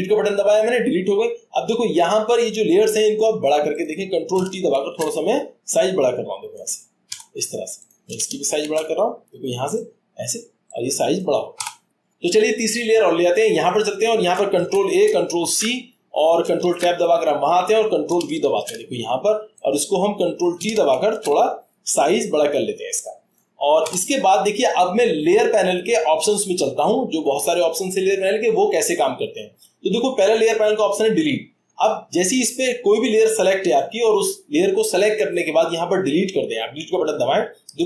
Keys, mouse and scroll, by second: 3.8 click, 4.8 ctrl+t, 6.6 click, 7.1 Return, 7.9 click, 8.6 ctrl+t, 10.3 click, 13.7 click, 14.6 ctrl+a, 15.5 ctrl+c, 16.6 ctrl+Tab, 18.5 ctrl+v, 20.3 click, 21.1 ctrl+t, 23.3 click, 23.8 Return.